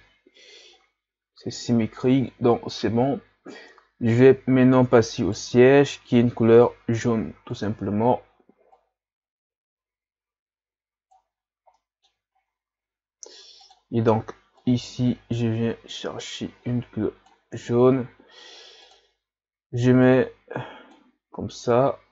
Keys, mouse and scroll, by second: 5.3 right click, 7.6 click, 8.7 click, 11.8 middle click, 12.3-13.1 scroll up 5, 14.6 click, 15.5-16.6 drag, 20.2 click, 22.0 a.